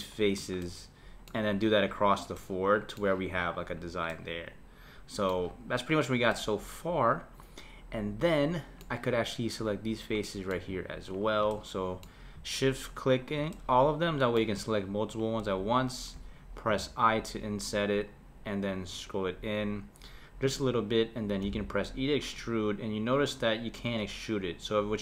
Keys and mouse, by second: 0.1 shift+click, 0.6-5.9 middle drag, 5.9 click, 6.3-9.3 middle drag, 9.7 click, 10.2 middle click, 11.2 shift+click, 11.5-13.1 middle drag, 13.1 shift+click, 13.5-15.2 middle drag, 15.2 shift+click, 16.7 i, 21.5 e.